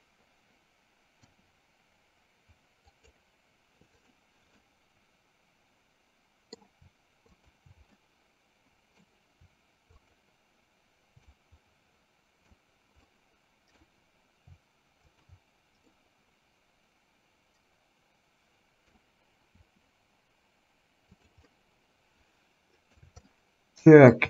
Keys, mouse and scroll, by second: 4.1 click, 4.8-6.8 middle drag, 8.3-9.3 middle drag, 10.0 shift+click, 11.5-12.6 middle drag, 13.3 middle click, 16.1-19.1 middle drag, 19.8 r, 21.6-23.1 middle drag, 23.5 shift+middle click.